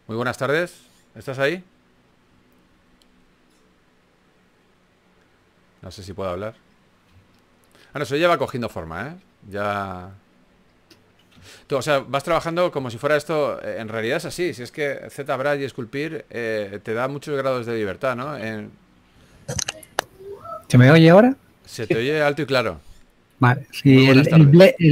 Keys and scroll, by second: 3.0 4, 8.5 3, 13.1-14.2 typing, 19.1 typing.